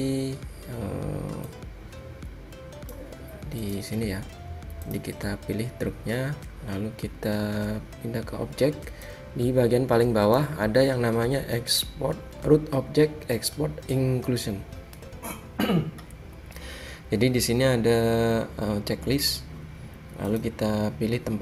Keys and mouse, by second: 1.7-6.8 drag, 9.3-11.1 drag, 19.5-21.4 drag.